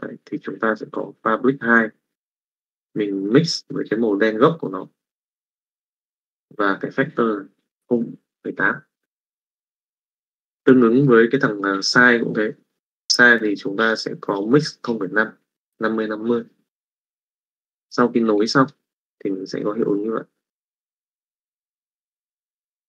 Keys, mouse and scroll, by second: 1.5 middle click, 2.5-3.6 drag, 19.1 click, 20.6 click, 21.9 middle click.